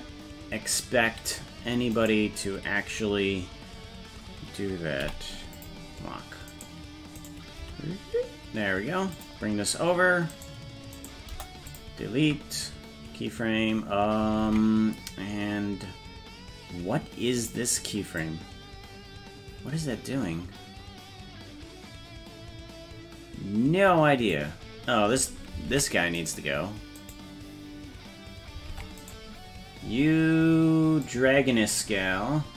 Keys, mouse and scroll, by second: 2.0 right click, 5.0 i, 6.6 right click, 7.3 right click, 7.6 g, 10.4 right click, 11.0 right click, 11.3 Delete, 14.5 ctrl+Tab, 17.5 click, 18.3-24.4 drag, 25.8 ctrl+Tab, 26.3 right click, 28.8 ctrl+Tab, 29.1 right click, 31.1-32.5 drag, 31.6-32.5 scroll down 9.